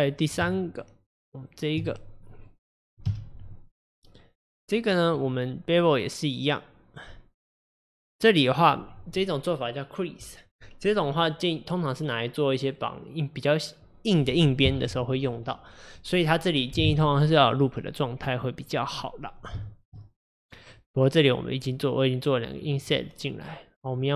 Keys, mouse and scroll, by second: 0.5 Tab, 2.3 middle click, 3.1 KP_Divide, 3.8-4.9 middle drag, 4.9-5.2 scroll down 4, 5.2-8.2 middle drag, 17.6-20.0 middle drag, 20.0-20.4 scroll up 1, 20.4 click, 21.8-23.9 middle drag, 23.9 click.